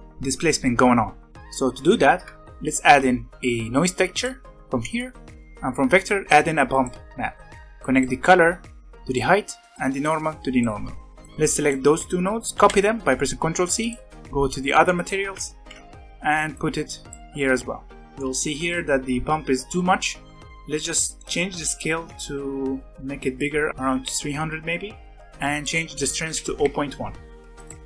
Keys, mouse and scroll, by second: 1.2 scroll up 2, 1.4-2.7 middle drag, 2.7 shift+a, 7.1-7.8 scroll up 1, 7.8 click, 8.1 click, 9.7 click, 11.2 drag, 12.5 ctrl+c, 13.7 click, 14.7 middle click, 14.9 click, 15.5 ctrl+v, 16.5-18.0 drag, 18.0-20.4 shift+middle drag, 20.4-23.8 drag, 23.8 KP_0, 25.1 scroll up 6, 25.5-27.5 drag.